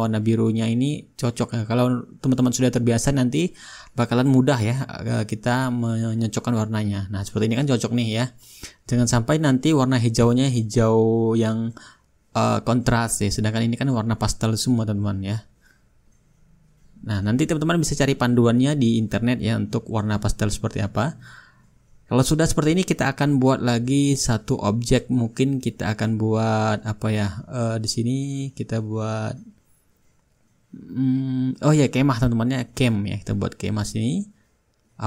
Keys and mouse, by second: 0.6-2.7 drag, 3.9-8.0 drag, 8.2-9.9 drag, 10.9-12.9 shift+drag, 13.4-14.5 drag, 14.9-17.6 drag, 16.5 shift+right click, 17.6 right click, 18.0-21.1 middle drag, 21.1 shift+click, 21.1 shift+right click, 21.4-22.5 shift+right drag, 33.1-34.3 drag.